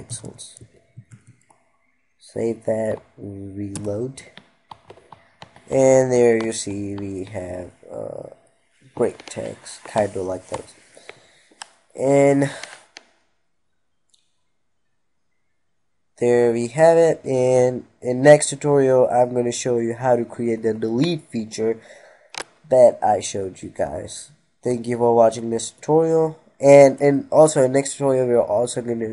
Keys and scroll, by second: 0.5 ctrl+s.